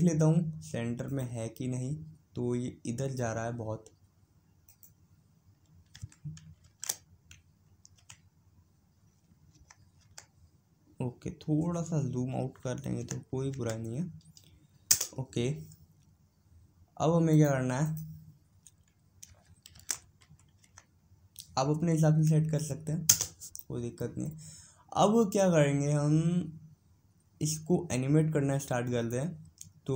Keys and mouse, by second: 1.7-3.4 drag, 5.4-7.0 drag, 17.9-20.2 drag, 24.9-28.8 middle drag.